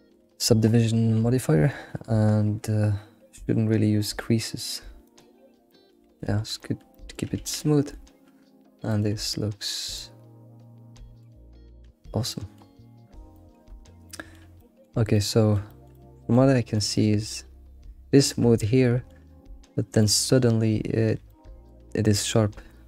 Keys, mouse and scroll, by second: 0.0 ctrl+2, 3.4-5.1 drag, 5.7-6.0 middle drag, 6.0 alt+shift+z, 6.3 scroll down 3, 6.6-9.0 shift+middle drag, 9.2-9.9 scroll up 6, 12.3 middle click, 13.1 scroll down 1, 13.3-13.7 shift+middle drag, 13.8 scroll up 2, 14.1-22.8 shift+middle drag, 22.6-22.8 scroll down 1.